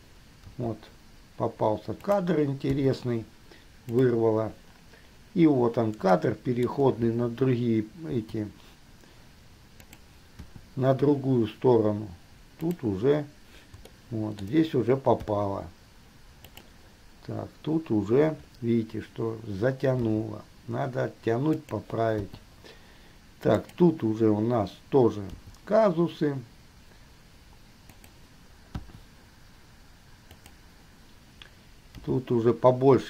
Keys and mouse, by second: 0.7 g, 3.0 i, 4.1 click, 6.5-6.9 shift+middle drag, 8.2 g, 10.7 i, 14.1-14.6 shift+middle drag, 15.4 i, 16.7 click, 20.4 g, 22.5 i, 23.7 click, 25.5 g, 30.5 click, 32.1 g.